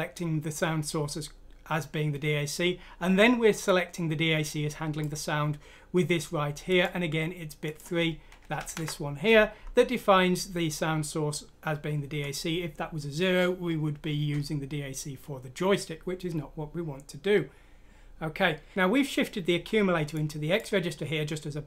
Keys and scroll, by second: 8.6 Left.